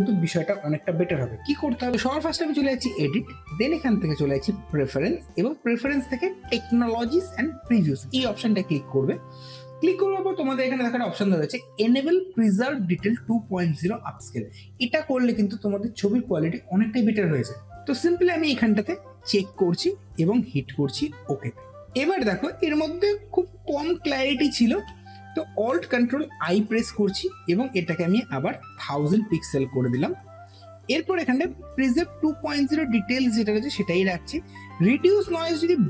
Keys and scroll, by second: 26.1 ctrl+alt+i, 28.9 KP_0, 29.6 n.